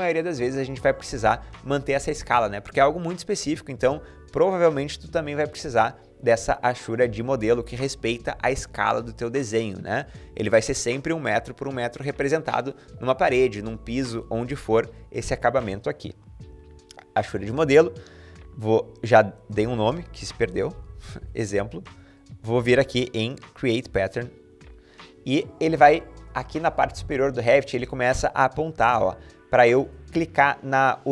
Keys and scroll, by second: 19.8-21.4 typing.